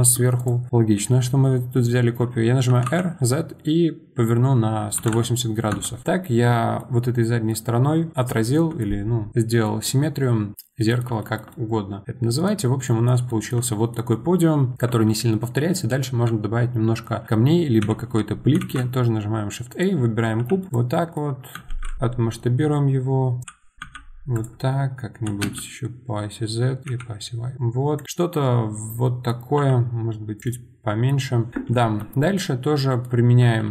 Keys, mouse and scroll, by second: 0.4 click, 2.6 r, 6.0-12.6 middle drag, 12.6 scroll down 1, 12.8-17.8 middle drag, 17.8 KP_7, 18.6 shift+a, 20.9-21.5 middle drag, 28.0-29.6 middle drag, 30.4-32.1 middle drag, 32.1 scroll up 3, 32.4-33.7 middle drag.